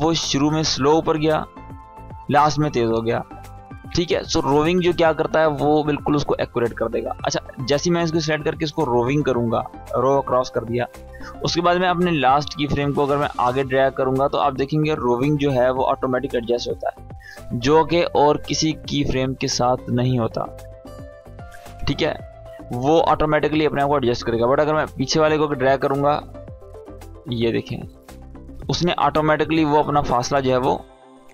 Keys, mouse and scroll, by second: 2.6 space, 3.0-5.3 drag, 7.7 right click, 9.4 click, 11.7-16.1 drag, 17.7 space, 21.4 space, 22.0-22.6 click, 22.6 space, 24.4-27.5 drag, 28.4 space, 29.7-30.4 click, 30.4 space, 31.2-31.3 drag.